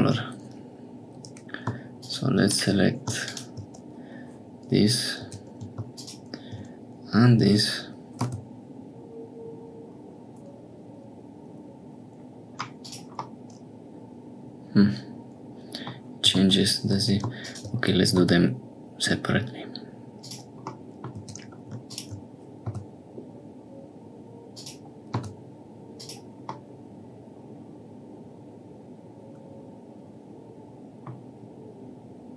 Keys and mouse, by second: 2.4 click, 5.2 2, 5.7 alt+shift+click, 13.2-15.5 middle drag, 15.8 click, 16.3 ctrl+z, 18.1 s, 20.7 middle click, 21.1 2, 22.6 s, 25.1 s, 26.5-28.2 middle drag, 28.2-29.2 drag, 29.2 middle click, 29.2 click, 29.4 middle click, 29.5 click, 29.6 middle click, 29.7-31.2 drag.